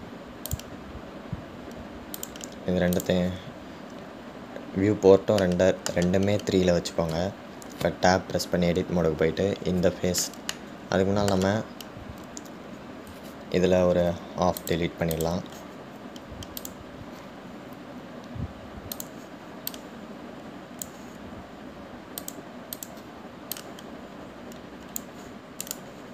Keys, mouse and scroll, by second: 1.7-5.6 drag, 5.6-6.6 scroll up 1, 6.6-8.6 shift+middle drag, 8.6 Tab, 11.8-14.9 middle drag, 17.9 click, 20.2 click, 20.9 click, 23.4 click, 24.0 click.